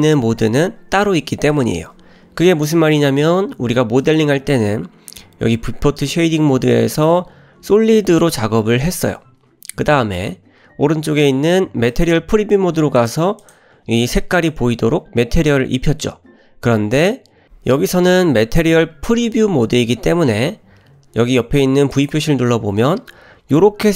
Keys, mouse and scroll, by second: 4.0 click, 12.0 click, 13.0 click, 13.4 click, 14.4 click, 17.5-19.2 drag, 21.9-23.9 drag.